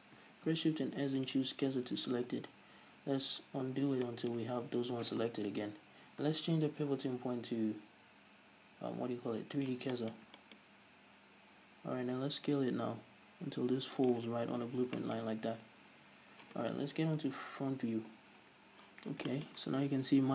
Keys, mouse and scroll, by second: 0.0 shift+right click, 0.7 shift+s, 2.1-2.5 scroll down 1, 2.5 ctrl+z, 3.8-4.2 scroll down 1, 4.4-7.0 middle drag, 5.9 KP_3, 7.0 ., 10.3 shift+middle click, 11.0-12.0 scroll up 1, 12.0-12.4 scroll down 1, 12.4-14.1 middle drag, 12.4 s, 14.5 shift+click, 15.0-15.4 scroll down 1, 15.4-16.0 shift+middle drag, 16.0-17.3 scroll up 1, 17.3 KP_1, 19.7 shift+middle click, 19.9-20.3 scroll up 1.